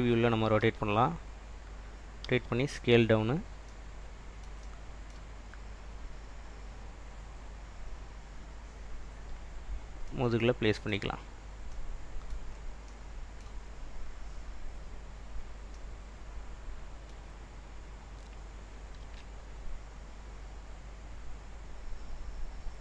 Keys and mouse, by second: 0.7 r, 1.8 click, 2.5 s, 3.2 click, 11.3 click, 11.8 middle click, 19.1 r, 22.4 click.